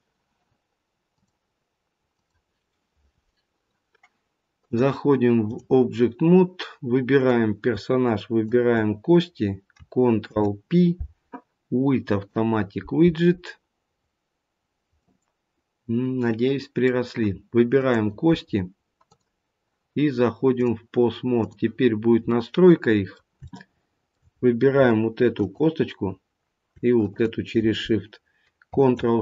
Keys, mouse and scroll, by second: 4.5 click, 7.1 click, 8.4 shift+click, 8.6 shift+click, 10.3 ctrl+p, 13.8-14.5 scroll down 1, 14.5-14.9 scroll up 2, 15.0 middle click, 18.0 click, 19.0 click, 21.9 click, 21.9 scroll down 2, 22.2 middle click, 23.4 shift+middle click, 24.3 scroll up 3, 26.5 click, 26.9 shift+click.